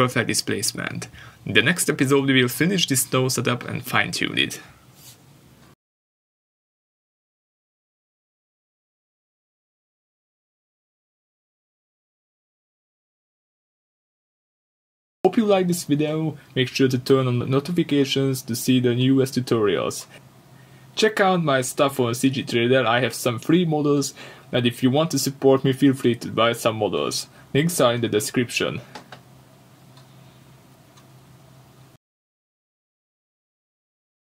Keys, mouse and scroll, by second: 1.8 middle click, 1.9-3.2 scroll up 1, 3.2 click, 7.3 scroll up 1, 7.5 scroll down 1, 9.9 middle click, 11.1 scroll up 1, 11.7 scroll down 1, 12.3 middle click.